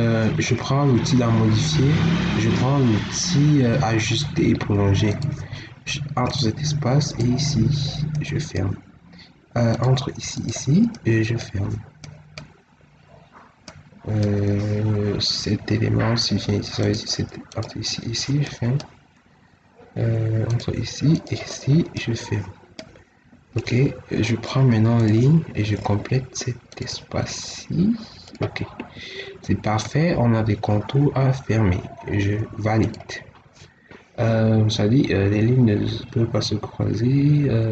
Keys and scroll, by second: 23.6 Escape, 28.7 Escape.